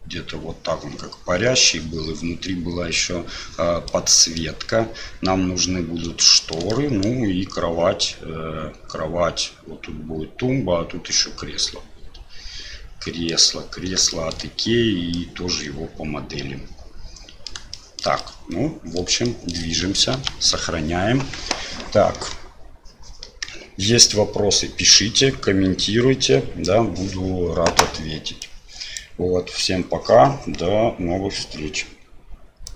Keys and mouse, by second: 4.0 middle click, 6.4 shift+click, 6.7-7.1 drag, 11.6 drag, 11.7-12.3 middle drag, 12.3-13.2 drag, 13.2 middle click, 14.2 shift+middle click, 15.3-17.5 middle drag, 17.9 shift+middle click, 18.3-19.0 middle drag, 19.4 shift+middle click, 20.1 ctrl+s.